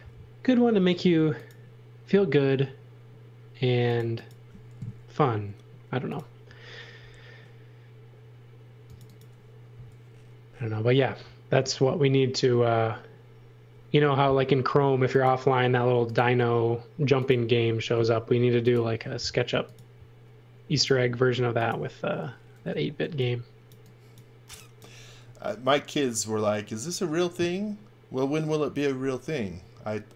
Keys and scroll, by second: 0.9 a, 12.5 space, 15.9 m, 18.0 l, 22.9 e.